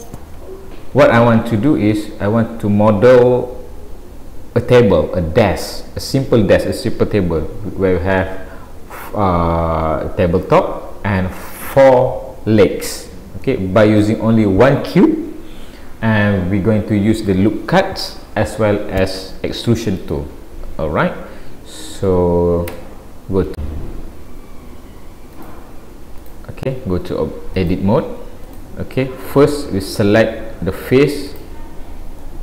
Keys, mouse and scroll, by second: 23.6-24.5 scroll down 4, 23.6 n, 25.4 click, 25.4-26.2 scroll up 2, 27.6 click, 29.4 middle click, 31.3 click, 32.2 middle click.